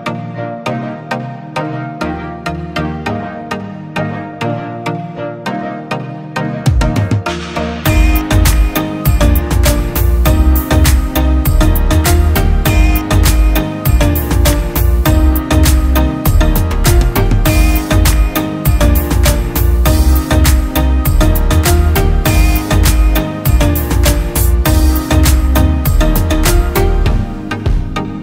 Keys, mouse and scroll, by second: 2.7 double click, 8.0-9.2 typing, 11.2-12.3 typing, 16.0 double click, 27.5 alt+right click.